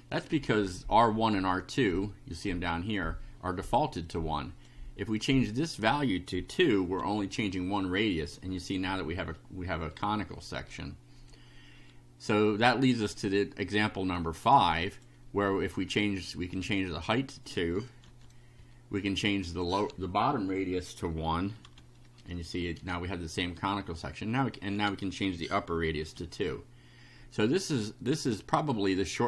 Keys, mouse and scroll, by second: 4.1 click, 5.5 2, 7.1 F5, 13.1-14.6 drag, 14.9 click, 15.9 click, 16.6 2, 18.0 F5, 19.3 click, 19.9 2, 21.6 F5, 24.1 click, 24.8 2, 26.0 F5, 28.2-29.2 drag.